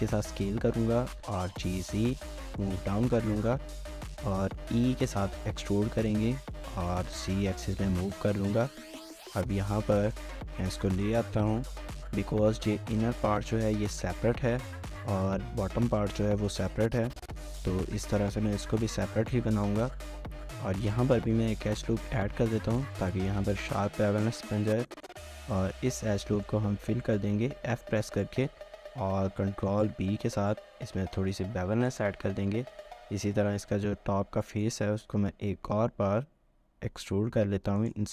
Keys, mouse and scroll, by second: 1.0-2.2 typing, 3.2 shift+middle click, 3.7 alt+click, 4.0 shift+middle click, 4.1 alt+click, 4.4 typing, 7.5-8.3 typing, 7.8 scroll down 1, 8.0 shift+middle click, 10.1-10.7 typing, 10.4 middle click, 11.4 shift+middle click, 13.4 shift+middle click, 18.2 shift+middle click, 18.8 shift+middle click, 20.0 shift+middle click, 20.3 scroll up 1, 20.9 ctrl+r, 24.1 shift+middle click, 24.4 scroll down 1, 24.6 shift+middle click, 25.4 middle click, 25.7 alt+click, 25.9 middle click, 27.6 f, 27.8 shift+middle click, 29.7 ctrl+b, 34.4 middle click, 35.0 i.